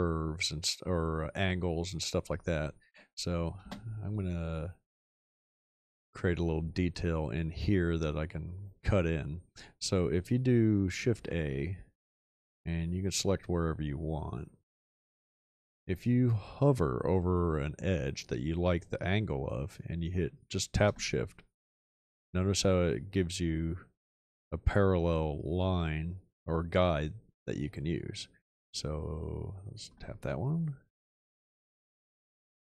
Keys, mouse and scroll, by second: 3.6 space, 11.1 shift+a.